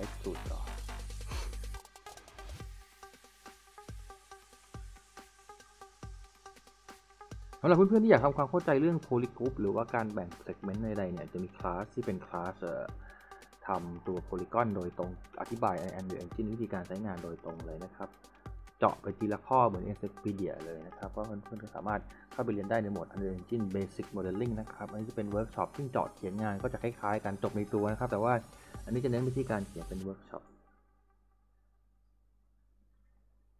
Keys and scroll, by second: 9.0-10.0 typing, 22.3-24.6 typing, 26.4 q, 26.8 s, 28.7 w, 32.6-33.5 typing.